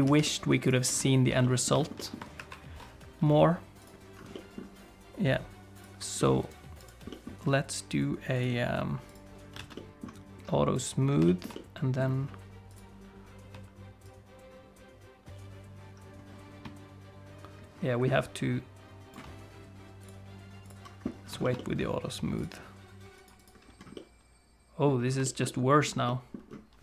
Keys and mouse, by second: 0.1 alt+z, 0.2 middle click, 0.6 click, 1.0 shift+middle click, 1.4 middle click, 1.8 shift+middle click, 2.0 middle click, 2.4 ctrl+1, 3.8 click, 4.3 middle click, 6.2 middle click, 6.5 right click, 7.1 middle click, 9.1 click, 9.6 alt+a, 9.7 middle click, 11.3 shift+middle click, 11.5 middle click, 12.7 click, 14.1-19.1 shift+drag, 20.0 click, 21.4 shift+middle click, 21.6 middle click, 22.4 click, 23.2 click, 23.9 middle click, 25.2 shift+middle click, 25.4 middle click, 26.1 middle click.